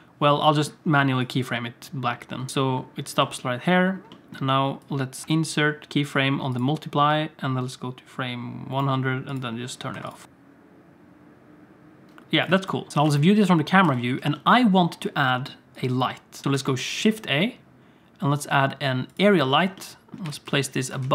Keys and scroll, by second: 2.5 alt+shift+z, 2.5 space, 3.2 space, 5.3 i, 10.2 i, 12.9 alt+a, 12.9 ctrl+s, 12.9 KP_0, 13.1 space, 13.8 space, 16.5 shift+a, 20.3 g, 21.0 alt+shift+z.